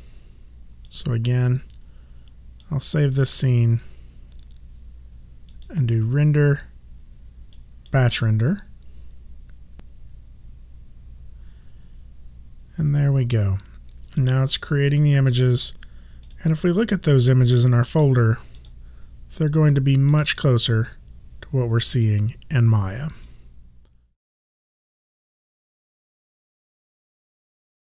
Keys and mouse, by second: 0.8 click, 5.5 click, 8.2 click, 16.2 click, 23.3 click.